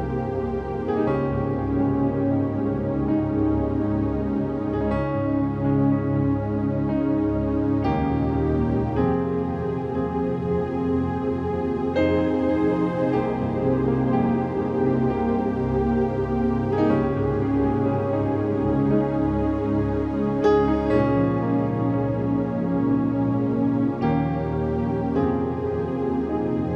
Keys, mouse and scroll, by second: 0.6 click, 1.7-3.1 drag, 3.1 v, 3.5 ctrl+h, 4.1-4.6 scroll down 1, 4.6 space, 4.6-6.0 drag, 7.1 click, 8.1 ctrl+click, 8.7 Down, 10.9 Down, 13.9 Down, 15.3 click, 16.5 click, 16.5 click, 16.8 d, 18.1 click, 24.6 click, 25.8-26.7 typing.